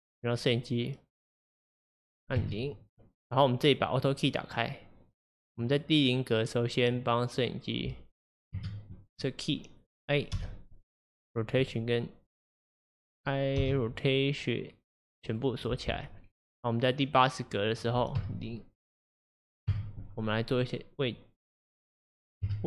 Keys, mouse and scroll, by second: 0.2 click, 1.6-2.6 drag, 2.4 KP_0, 4.0 click, 4.8-8.8 drag, 8.6 KP_0, 10.4 i, 11.8 i, 17.0-20.0 drag, 18.2 KP_0, 19.4 middle click, 19.7 KP_0, 20.7-22.5 middle drag, 22.5 KP_0.